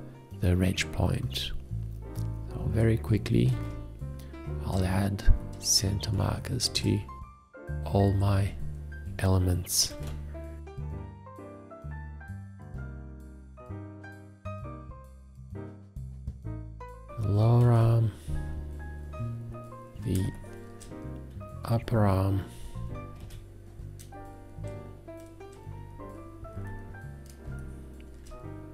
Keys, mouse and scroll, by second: 3.6 alt+`, 6.1 space, 8.2 F2, 9.9 alt+`, 12.8 F2, 13.9 alt+`, 16.4 F2, 17.6 alt+`, 20.2 space, 21.6 F2, 23.2 alt+`, 27.4 space.